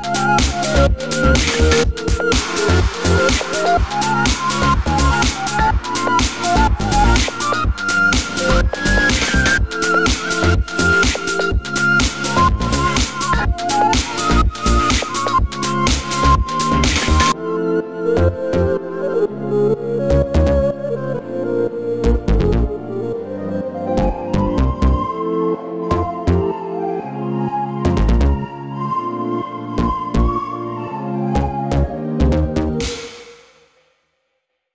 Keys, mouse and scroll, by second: 0.4 i, 1.1 click, 1.1 e, 1.4 click, 1.9 i, 1.9 click, 2.3 click, 2.9 a, 3.3 shift+d, 4.1 s, 5.1 g, 5.2 click, 6.4 middle click, 6.8-8.2 shift+right drag, 8.2 shift+a, 10.0 click, 10.9 middle click, 11.1 g, 11.5 click, 12.1 l, 13.2 g, 13.3 click, 13.5 scroll down 2, 13.6-16.3 middle drag, 15.0-15.5 scroll up 2, 16.1 scroll up 2, 16.3 Tab, 16.3 click, 16.4 Tab, 16.9 ctrl+r, 17.9 3, 18.0 click, 18.5 g, 20.3 click, 20.6-21.3 middle drag, 21.2 e, 21.3 click, 21.3 ctrl+z, 22.4 i, 23.7 middle click, 23.9 click, 25.2 Tab, 25.3 middle click, 25.4 click, 25.5 scroll down 2, 25.7-27.2 middle drag, 27.2 click, 27.3 middle click, 27.4 Tab, 28.1 click, 28.4 i, 29.7 middle click, 29.9 2, 30.0 click, 30.3 g, 31.0 Tab, 31.1 middle click, 31.4 click, 31.8 Tab, 32.0 click, 32.2 g, 32.9 middle click, 33.0 Tab, 33.1 scroll down 2, 33.3 click, 33.4-34.7 middle drag, 34.6-34.7 scroll up 1.